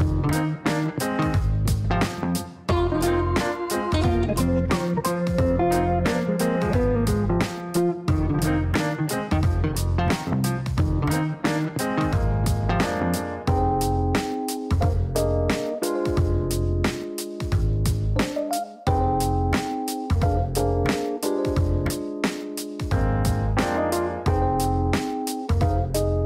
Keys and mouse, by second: 1.0 click, 1.9 click, 2.8 click, 4.2 KP_Multiply, 4.5 KP_2, 4.8 KP_Enter, 5.9 click, 6.6 click, 8.6 click, 11.0 click, 12.1 click, 12.5 right click, 13.7 click, 16.5 click, 19.7 click, 20.0 Delete, 21.3 click, 22.4 click, 23.5 click, 24.5 click, 24.9 click.